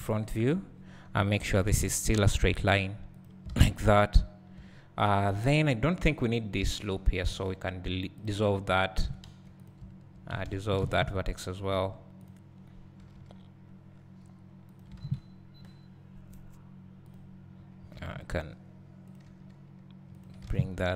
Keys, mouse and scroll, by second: 0.0 KP_3, 1.6 g, 3.5 alt+a, 4.0-5.1 scroll down 2, 5.1 alt+click, 5.6-5.9 scroll up 2, 5.9-7.4 scroll down 2, 7.4-8.3 scroll down 1, 8.3 x, 8.7 scroll up 2, 9.1 alt+a, 9.3 2, 9.7 click, 11.8 1, 12.3 click, 13.1 g, 14.8 click, 15.0 alt+a, 15.8-17.2 scroll down 1, 17.2 click, 18.0 g, 19.3 g, 20.2 click, 20.5 alt+a.